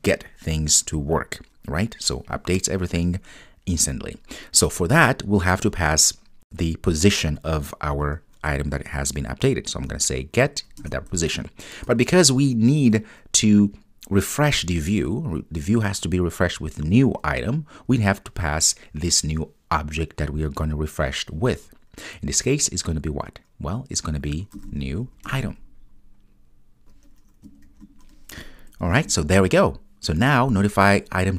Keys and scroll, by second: 5.2 Return, 10.9 Return, 25.4 Return, 29.7 super+s.